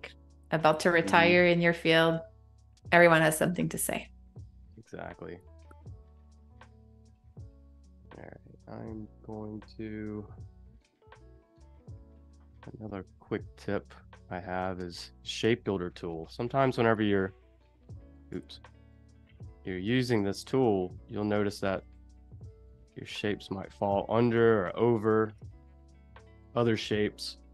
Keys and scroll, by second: 0.6 z, 1.4 a, 8.3 shift+m, 13.5 space, 15.2 space, 18.6 super+z, 22.3 super+z, 24.1 space.